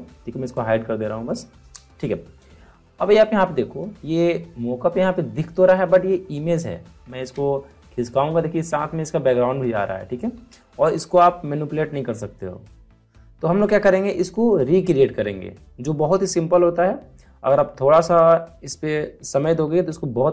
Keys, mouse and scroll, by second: 0.4 click, 5.8 click, 7.1 ctrl+click, 7.7 click, 10.3 ctrl+z.